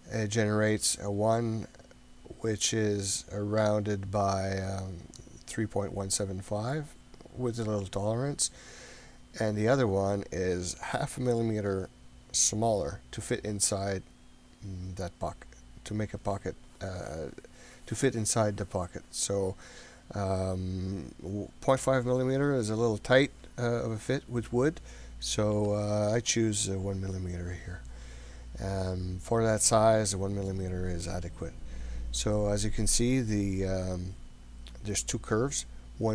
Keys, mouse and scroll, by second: 8.9-27.7 drag, 28.2-28.9 scroll down 6, 29.7-30.1 scroll up 2, 30.4 scroll down 1, 31.7-32.6 scroll up 9, 33.2 scroll down 2.